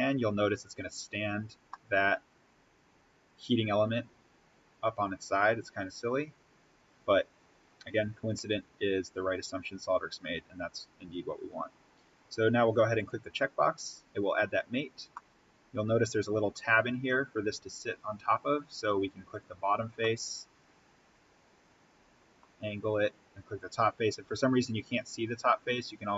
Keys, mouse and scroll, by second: 1.4 scroll down 1, 1.7-6.0 middle drag, 6.0 click, 11.3-11.6 scroll down 1, 11.6-12.9 scroll up 1, 12.9 click, 15.1-19.2 middle drag, 19.2 click, 19.9-24.9 middle drag, 24.9-25.4 scroll up 1.